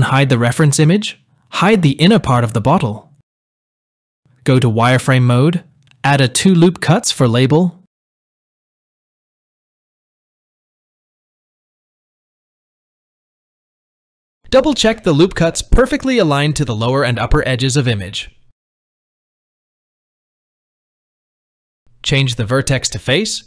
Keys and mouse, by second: 0.9 click, 3.5 click, 5.1 z, 7.5 ctrl+r, 8.9 shift+middle click, 9.4 ctrl+r, 18.2 click, 23.2 click.